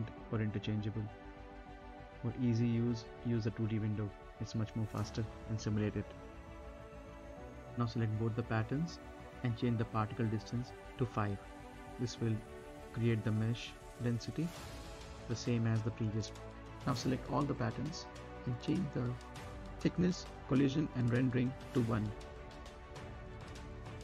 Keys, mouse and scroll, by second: 0.0 scroll up 1, 0.2 middle click, 0.4-0.9 scroll down 2, 0.6 middle click, 0.9 middle click, 1.8 click, 3.1 click, 3.7 scroll up 1, 3.9 space, 4.4 scroll up 1, 4.7 middle click, 5.1 right click, 6.0-6.3 scroll down 2, 6.1 middle click, 6.3 right click, 6.6 space, 7.3 click, 9.5 5, 9.8 click, 10.2 space, 10.9 scroll up 1, 15.7-16.6 scroll up 1, 16.6 middle click, 17.2-19.1 drag, 19.1-21.0 scroll down 1, 21.9-23.0 drag, 23.0 1, 23.8 click.